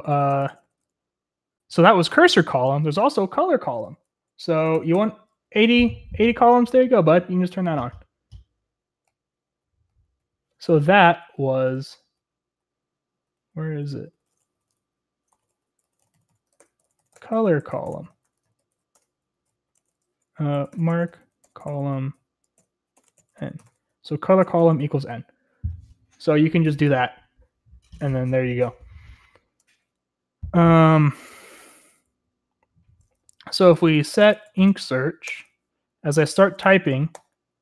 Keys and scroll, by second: 0.0-8.3 typing, 11.0-25.1 typing, 31.1 typing, 33.6-37.6 typing.